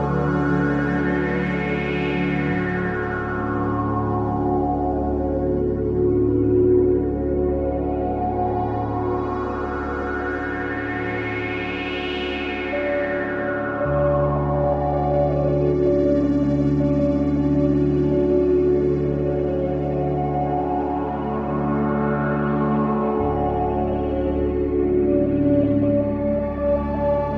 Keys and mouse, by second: 0.5-2.6 drag, 2.1 ctrl+v, 2.8 Return, 5.4-6.6 drag, 6.7 click, 9.0 click, 11.0 click, 12.1-13.4 alt+drag, 14.0-20.3 drag, 22.7-25.8 drag, 25.5 space.